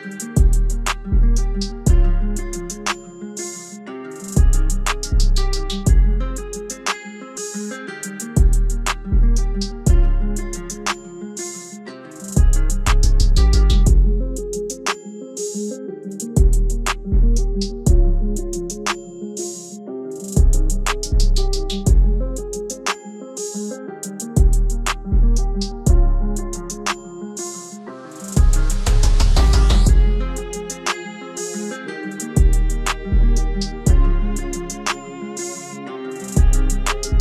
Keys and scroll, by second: 0.7 ctrl+s, 13.8 F4, 32.5 ctrl+a.